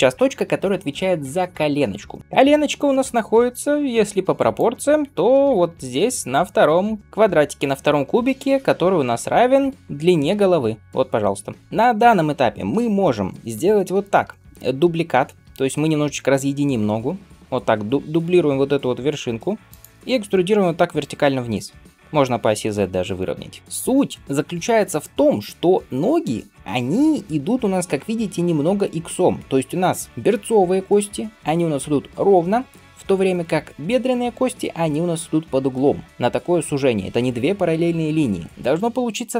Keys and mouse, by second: 15.3 shift+d, 20.4 e.